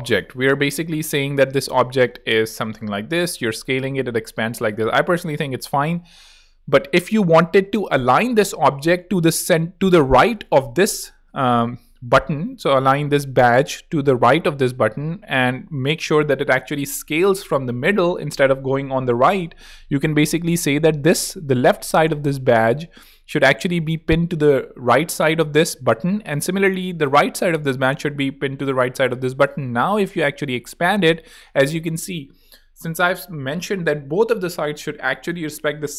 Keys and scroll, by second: 0.9-2.9 typing, 3.5 super+z, 30.3-31.5 typing.